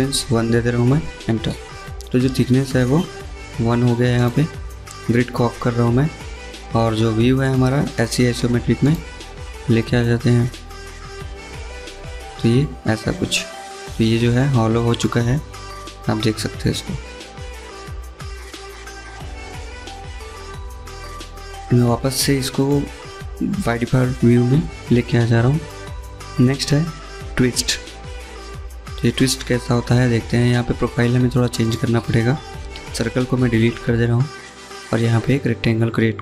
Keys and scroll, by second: 0.2 Return, 31.9 Delete.